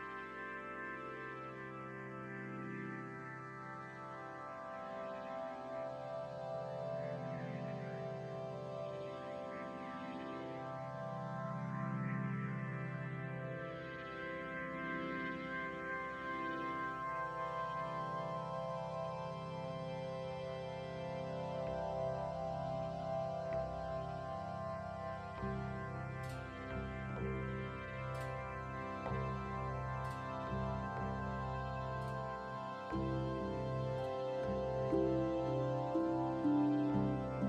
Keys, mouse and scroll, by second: 0.6 right click, 1.1 click, 1.4 middle click, 2.7 scroll up 1, 3.0 middle click, 3.5 click, 3.7 middle click, 4.5 middle click, 4.5 right click, 4.9 r, 6.6 middle click, 7.7 right click, 8.0 click, 9.8 scroll down 1, 9.9 click, 10.5 middle click, 11.7 scroll up 1, 11.8 scroll down 1, 12.2 middle click, 12.2-12.7 scroll down 2, 13.0 middle click, 13.2-13.8 scroll up 1, 13.8 click, 13.8 scroll up 1, 15.5 right click, 16.0 x, 17.0 right click, 17.1 middle click, 18.2 Tab, 19.1 click, 19.7 g, 21.1 scroll up 2, 21.3 shift+middle click, 21.6 scroll up 1, 21.9 right click, 22.5 g, 24.3 right click, 24.8 g, 25.7-26.6 alt+right click, 26.6 g, 27.7-30.0 click, 30.0 g, 32.2 l, 33.0 s, 33.6 right click, 33.9 l, 34.3 s, 36.2 right click, 36.6 l, 36.8 s.